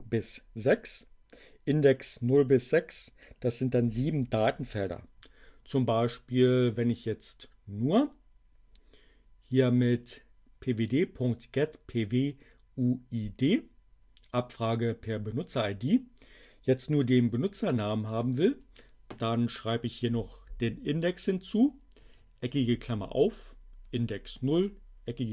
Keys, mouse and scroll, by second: 18.3 click, 21.9 alt+8, 23.7 0.